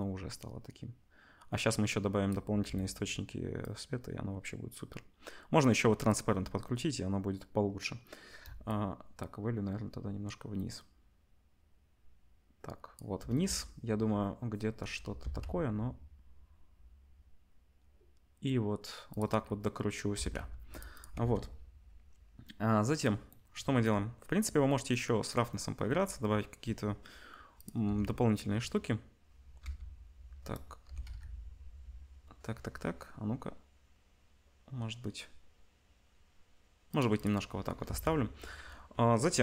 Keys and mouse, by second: 15.2 r, 19.2 middle click, 20.1 g, 20.9 click, 21.2 ctrl+s, 27.9 r, 37.1 click, 37.8 ctrl+s.